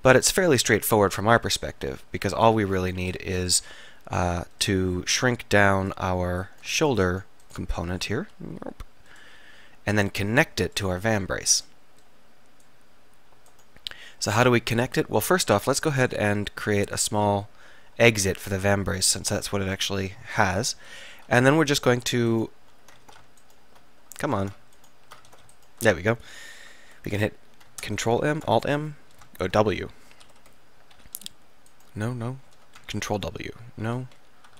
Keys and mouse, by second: 1.5 click, 1.5 r, 3.1 KP_7, 6.7 alt+right click, 8.3 s, 13.6-14.9 middle drag, 14.9 click, 15.4 e, 15.7 click, 16.1 s, 22.4 middle click, 23.1 ctrl+z, 24.5 ctrl+z, 25.4 ctrl+z, 28.1 ctrl+m, 30.5 Escape, 31.4 w, 33.4 ctrl+w.